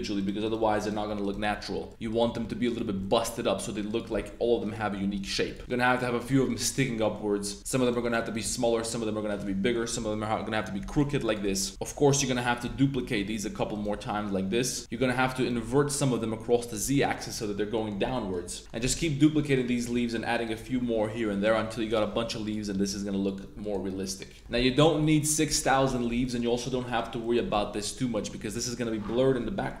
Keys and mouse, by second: 0.4 shift+click, 1.2 shift+click, 1.3 middle click, 1.5 g, 1.9 click, 2.1 s, 2.4 r, 2.8 s, 3.9 click, 3.9-5.6 typing, 5.6-6.0 drag, 6.4-6.8 drag, 7.0 middle click, 7.4 right click, 8.0 shift+right click, 8.2 shift+right click, 8.4 s, 9.4 middle click, 9.8 r, 9.9 z, 10.9 click, 11.2 click, 11.2-13.9 typing, 11.4 Tab, 11.6 click, 13.7 click, 14.8 click, 14.9 r, 15.3 click, 15.3 z, 16.6 click, 16.8 Tab, 16.9-17.3 middle drag, 17.7 click, 17.9 Tab, 18.0 drag, 18.6 click, 18.6 g, 18.8 Tab, 19.0 click, 19.3 click, 19.5 Tab, 19.9-23.7 typing, 21.4 middle click, 22.4 click, 23.6 click, 24.0 middle click, 24.3 click, 24.4 Tab, 24.5 middle drag, 24.9-25.2 middle drag, 25.4 middle drag, 25.8 Tab, 25.9 drag, 26.2 drag, 26.5 2, 27.2 click, 27.5 g, 28.1 drag, 28.1 z, 28.3 Tab, 28.6 click, 29.7 drag.